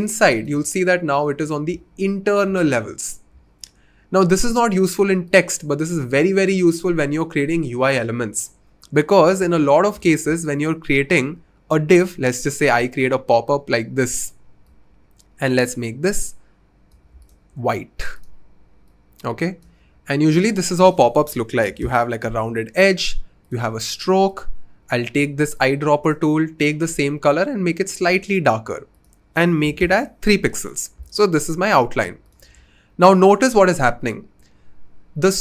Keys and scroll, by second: 21.2-21.8 typing, 25.6-26.2 typing, 29.6 typing.